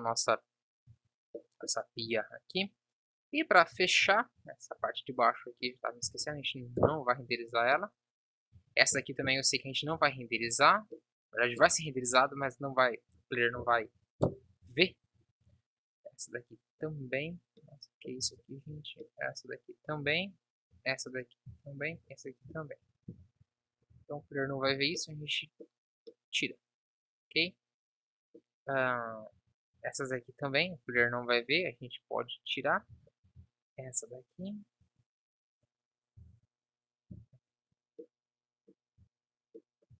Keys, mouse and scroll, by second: 0.0 Escape, 0.9 z, 2.9 KP_1, 3.7 z, 4.9 Tab, 6.1 Delete, 7.6 z, 13.6 Delete, 14.8 ctrl+s, 18.2-19.3 drag, 22.6 Delete, 24.0 z, 24.4 ctrl+s, 24.8 z, 29.4 Tab, 29.4-33.3 drag, 36.2 Delete, 38.1 click, 38.1 middle click, 38.6 middle click, 39.1 z.